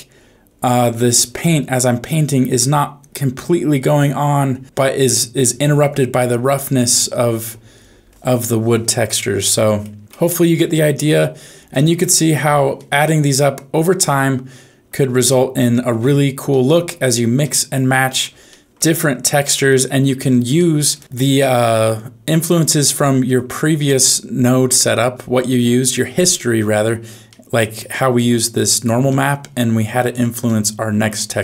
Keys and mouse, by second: 0.1 click, 0.5 click, 0.8 click, 1.1 click, 1.5 click, 2.0 click, 2.5 click, 3.0 click, 3.3 click, 3.7 click, 4.1 click, 4.5 click, 5.0 click, 5.4 click, 5.8 click, 6.2 click, 6.5 click, 6.9 click, 7.3 click, 7.8 click, 9.3 middle click, 10.7 middle click, 11.7 shift+middle click, 12.7-14.8 middle drag, 16.5 shift+middle click, 17.3 middle click, 18.5 shift+middle click, 19.4 middle click, 20.6 middle click, 21.0 n, 21.1-23.0 middle drag, 25.0 middle click, 27.2 middle click, 28.1 click, 29.2 middle click, 30.6 middle click.